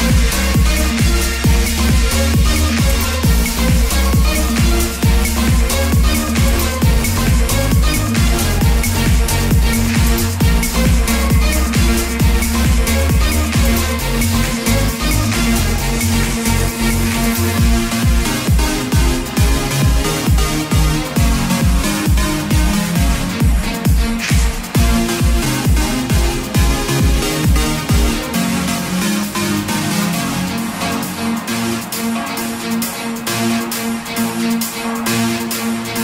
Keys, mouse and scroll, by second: 1.1 click, 2.6 ctrl+d, 7.0-18.9 drag, 21.1 KP_8, 21.3 KP_0, 24.6 click, 25.5 KP_3, 25.7 KP_0, 29.0 KP_2, 29.2 KP_0, 33.9 click, 35.2 ctrl+d.